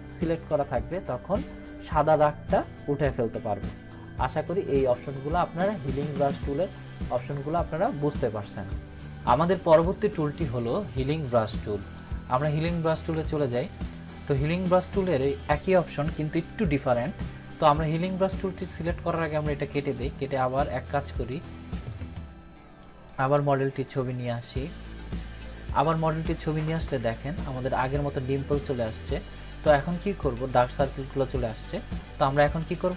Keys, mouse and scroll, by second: 5.3-6.3 drag, 12.3-13.2 drag, 21.9 click, 26.2 click.